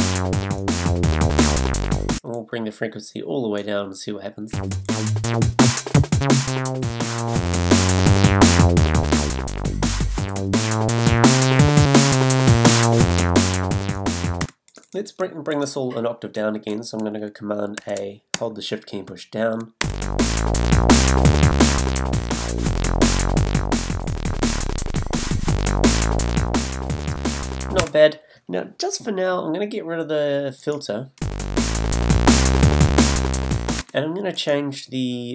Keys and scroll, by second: 2.1 space, 4.5 space, 14.4 space, 17.8 super+a, 18.3 shift+super+a, 27.8 space, 31.2 space, 33.8 space.